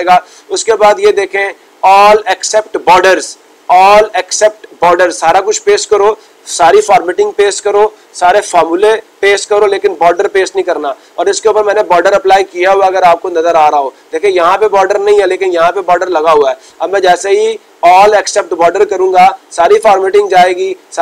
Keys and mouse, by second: 17.3-18.3 drag.